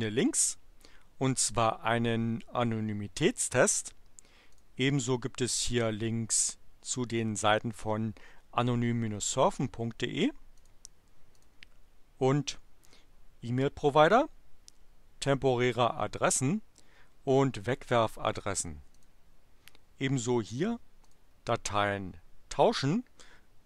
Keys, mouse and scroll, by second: 4.3 click, 10.5 click, 11.3 click, 19.0 click, 21.0 click.